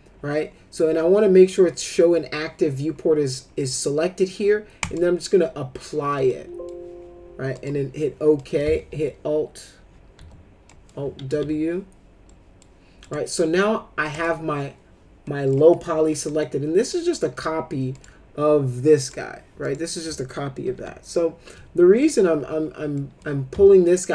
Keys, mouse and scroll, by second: 4.8 click, 6.3-6.7 middle drag, 7.5 click, 8.3 middle click, 8.8 alt+q, 10.1 alt+w, 10.6 middle click, 11.2 ctrl+z, 12.3 middle click, 13.0 click, 14.1 click, 15.2 middle click, 16.3 middle click, 16.8 click, 17.3 click, 17.9 click, 19.0 click, 19.6 click, 20.8 Delete, 22.0 click, 22.9 middle click, 23.8 shift+click.